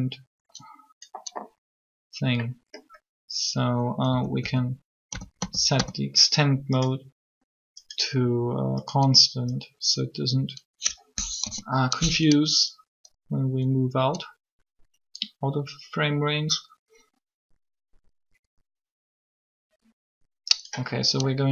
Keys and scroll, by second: 4.0 a, 4.1 a, 4.9 a, 5.7 a, 11.1 3.